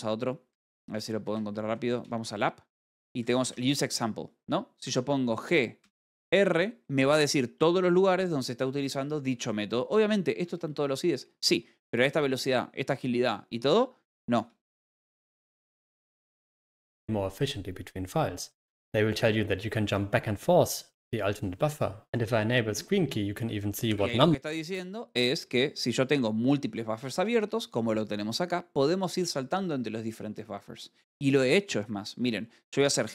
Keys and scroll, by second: 1.3-2.1 typing, 5.9 Return, 6.4 r, 8.1 p, 9.6 Return, 10.3 typing, 15.0 Escape, 27.1 Escape.